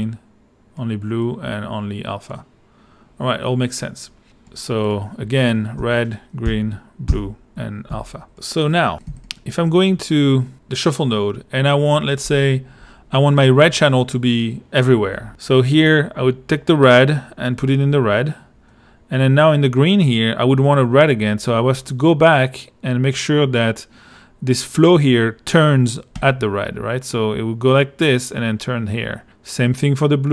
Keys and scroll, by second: 5.8 r, 6.4 g, 7.1 b, 7.9 a, 9.1 |.